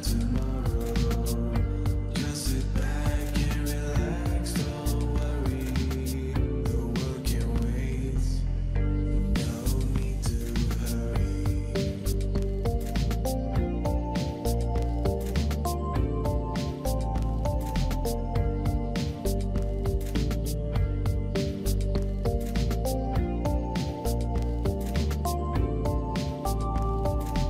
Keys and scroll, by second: 2.4 ctrl+g, 4.2-5.3 typing, 5.5 Return, 8.3 ctrl+z, 13.1 ctrl+3, 16.1 v, 17.3-17.8 typing, 18.9-19.7 typing, 19.7 Return, 19.8 Return, 24.9 shift+Down, 25.1 shift+Down, 25.3 shift+Down, 25.8 shift+Right, 26.1 shift+Right, 26.3 shift+Right.